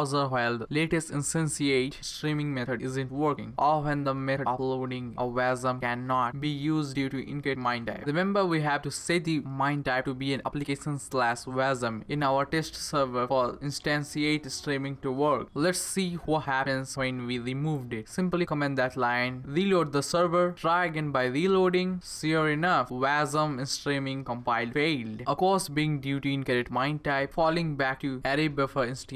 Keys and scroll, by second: 19.3 super+/, 20.4 ctrl+c, 20.6 Up, 20.9 Return.